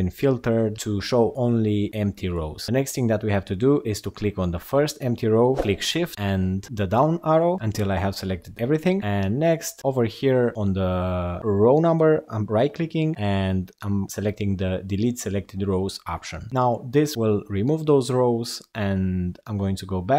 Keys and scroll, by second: 5.6 shift+Down.